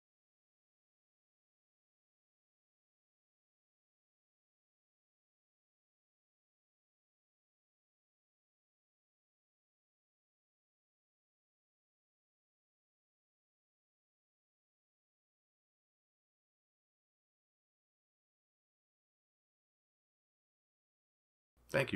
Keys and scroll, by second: 0.8 ctrl+s, 12.4 ctrl+s.